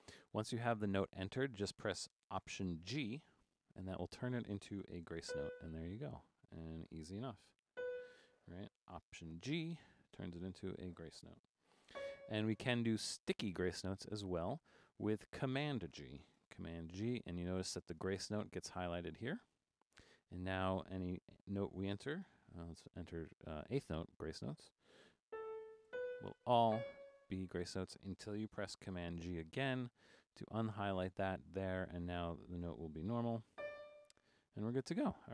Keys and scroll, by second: 3.3 alt+g, 4.6-5.8 typing, 7.0-8.2 typing, 9.5 alt+g, 10.8-12.4 typing, 13.3 Down, 13.5 Down, 17.0 super+g, 22.3 4, 25.4-26.7 typing, 29.6 super+g, 32.6-34.0 typing.